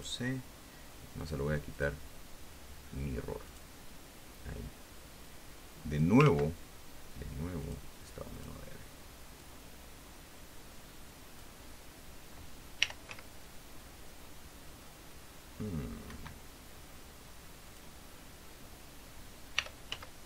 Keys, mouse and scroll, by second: 0.3 click, 1.5 click, 2.1 click, 3.8 click, 5.6 click, 6.7 ctrl+z, 8.0 click, 8.7 click, 9.7-11.9 drag, 13.1 r, 13.4 z, 16.4 Escape, 18.0 click, 19.9 r.